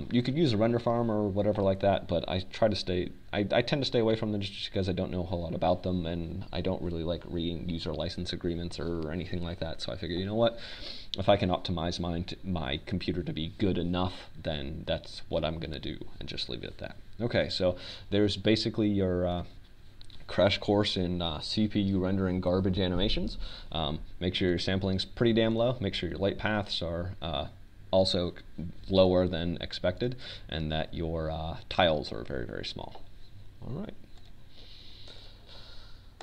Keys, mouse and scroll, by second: 22.7-24.5 drag, 27.8-30.7 drag, 33.3-35.1 drag.